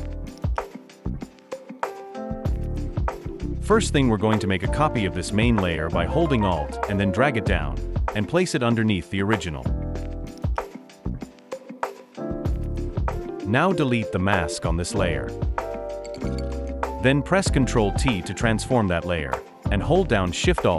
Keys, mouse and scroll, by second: 7.7 Delete, 10.6 alt+click, 14.2 right click, 17.9 ctrl+t, 19.3 alt+shift+click.